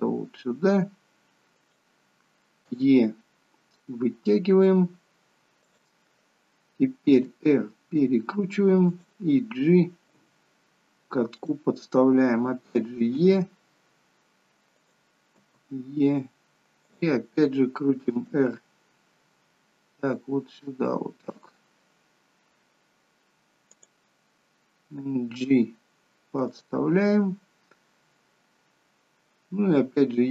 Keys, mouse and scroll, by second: 2.9 e, 7.1 r, 10.3 g, 13.3 r, 15.4 e, 18.3 r, 25.0 g, 30.0 e.